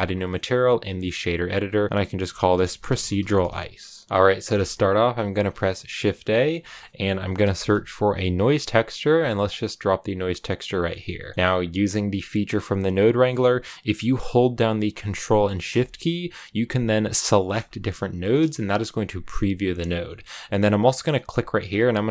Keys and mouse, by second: 0.0 click, 1.5 click, 2.6-4.0 drag, 4.0 BackSpace, 5.2 shift+a, 11.3 click, 17.4 ctrl+shift+click, 20.0 middle click, 21.6-22.1 drag.